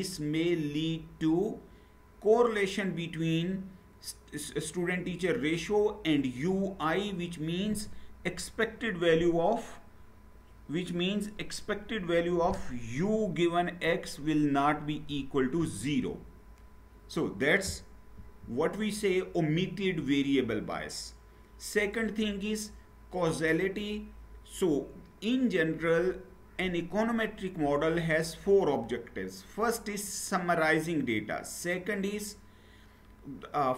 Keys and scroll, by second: 18.2 Down.